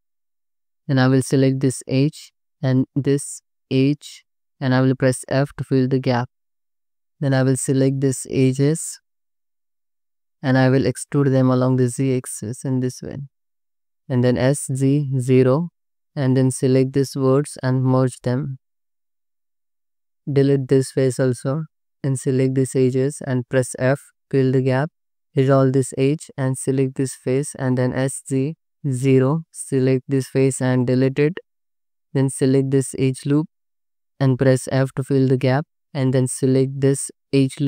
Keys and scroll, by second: 0.8 2, 5.8 f, 6.9 2, 11.2 e, 13.8 s, 14.4 z, 15.4 0, 15.8 alt+z, 16.7 1, 18.3 m, 19.6 3, 20.3 x, 24.0 f, 24.7 2, 25.7 ctrl+x, 26.3 3, 27.8 s, 28.1 z, 28.9 0, 30.1 3, 30.7 x, 32.0 2, 35.1 f, 36.1 2.